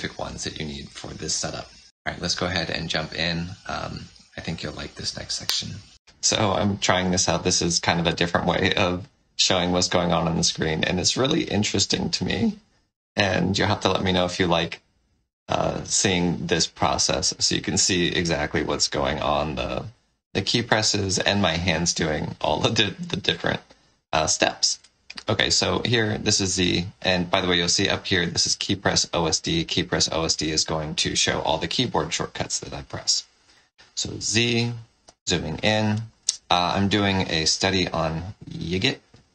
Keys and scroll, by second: 26.1 z, 33.5 z, 36.4 z, 37.5 space.